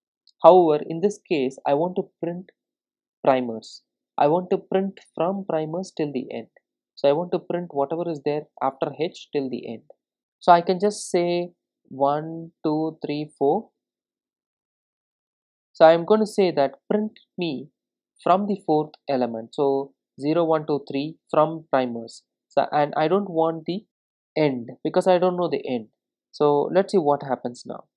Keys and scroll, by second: 1.4 super+d, 24.8 super+s, 27.1 super+s.